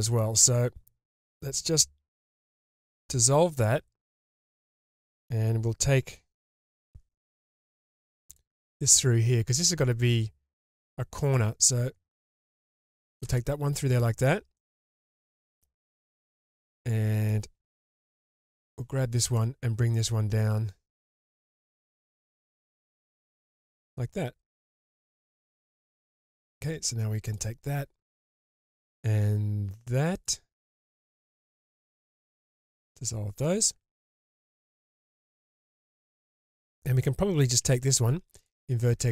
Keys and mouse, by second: 2.7 ctrl+x, 3.5-5.0 middle drag, 6.8 k, 14.6 shift+middle drag, 15.0-15.6 middle drag, 16.1-17.2 middle drag, 18.4 k, 25.8 click, 32.2 ctrl+x, 33.0-34.0 middle drag, 37.6 1, 39.0 shift+click.